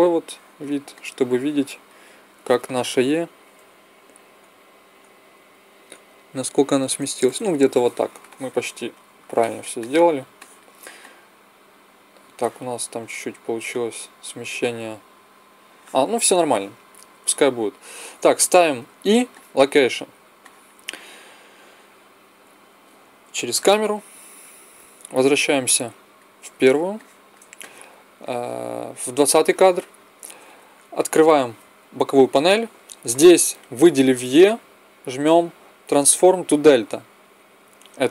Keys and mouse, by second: 3.4 g, 18.6 i, 23.0 KP_0, 25.1-26.8 drag, 26.8-28.1 middle drag, 31.0 t, 35.9-37.7 drag.